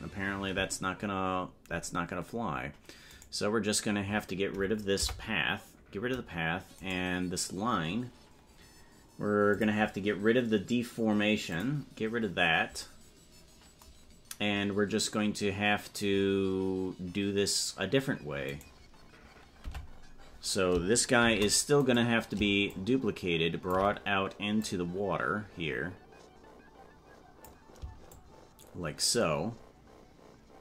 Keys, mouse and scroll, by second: 5.6 Delete, 6.9-9.5 right drag, 9.5 click, 11.5 click, 19.6 Tab, 22.7-23.7 shift+drag, 24.6-27.4 drag, 28.1-30.6 shift+drag.